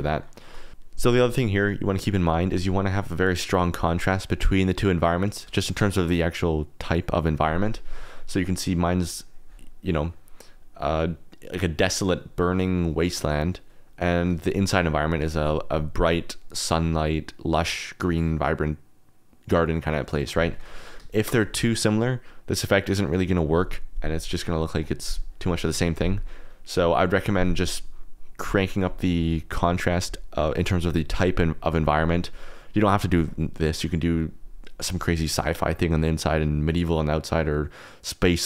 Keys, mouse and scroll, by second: 0.0 click, 0.4 shift+drag, 21.1 shift+click.